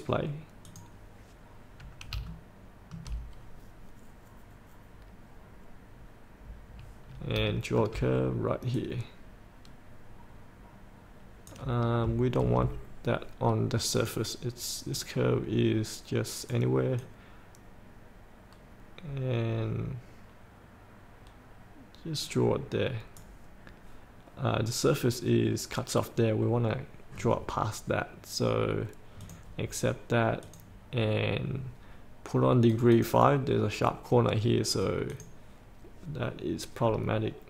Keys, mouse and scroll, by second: 2.5 shift+middle click, 7.6 shift+middle click, 8.9 click, 14.1-30.4 drag.